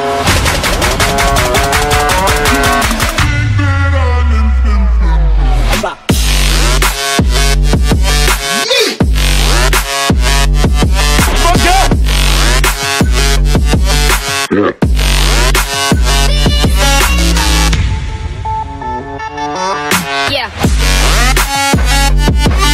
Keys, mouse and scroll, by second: 0.5 scroll, 3.0 scroll, 3.9 scroll, 6.1 middle click, 6.6 scroll, 6.8 middle click, 7.6 scroll, 9.4-9.8 scroll, 10.2 scroll, 10.7 scroll, 12.4 click, 15.4 click, 17.0 click, 17.5 click, 19.6 click, 20.6 click, 21.2 click, 22.5 click.